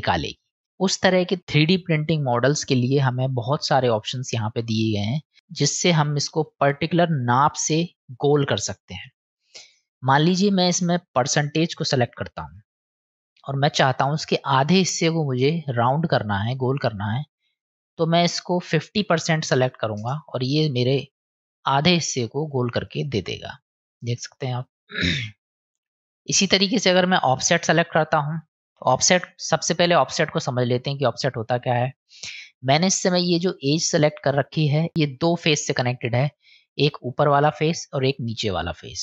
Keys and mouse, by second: 0.8-5.3 drag, 5.6 middle click, 10.1-12.6 drag, 13.2 middle click, 15.7-16.8 middle drag, 17.8-20.6 drag, 21.4 middle click, 23.0 middle click, 24.2 middle click, 26.0 click, 29.8-31.6 middle drag, 36.9 middle click, 38.9-39.0 middle drag.